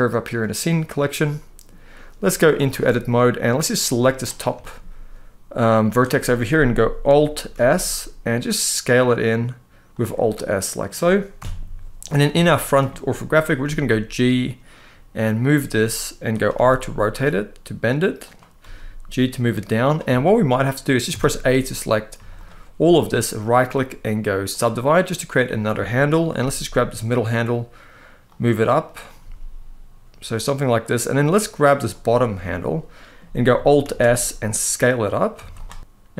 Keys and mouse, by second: 0.1 click, 0.8 middle click, 2.3 Tab, 2.8 middle click, 3.6 click, 4.3 shift+middle click, 5.6 click, 5.9 middle click, 7.3 alt+s, 9.6 click, 10.0 middle click, 11.1 KP_1, 12.1 shift+middle click, 13.3 g, 16.2 r, 17.9 click, 18.3 g, 19.5 click, 19.9 shift+middle click, 20.8 a, 21.8 z, 23.2-24.3 right drag, 26.1 g, 28.0 click, 28.6 click, 28.9 g, 30.5 click, 31.1 click, 32.1 middle click, 33.5 alt+s, 34.9 click, 35.1 z, 35.6 middle click, 35.9 KP_7.